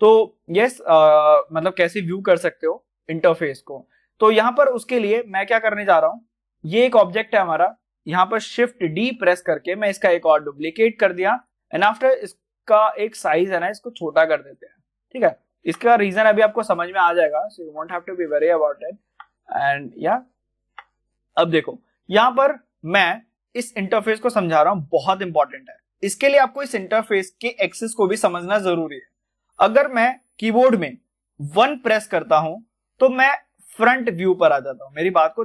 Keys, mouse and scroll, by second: 0.2-3.5 middle drag, 3.5-3.9 scroll down 1, 3.9 middle click, 4.1 scroll up 1, 4.9 middle click, 5.6 scroll up 1, 5.9-7.1 shift+middle drag, 7.1 click, 8.8 shift+d, 9.9-14.5 drag, 14.5 middle click, 15.1-16.9 shift+middle drag, 17.2 click, 17.6-20.2 middle drag, 20.2-31.5 shift+middle drag, 33.2-33.7 scroll down 1, 34.6 scroll up 1.